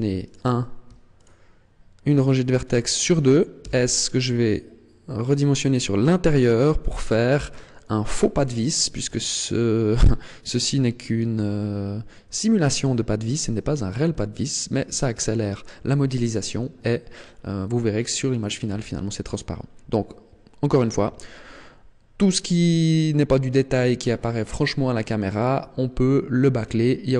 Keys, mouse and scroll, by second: 0.2 alt+right click, 1.2 alt+shift+right click, 2.2 alt+shift+right click, 3.6 s, 7.0 click, 8.9 Tab, 15.5-17.1 scroll up 1, 17.1 scroll up 1, 18.8 Tab, 23.1-24.6 scroll up 1, 24.6 shift+middle click.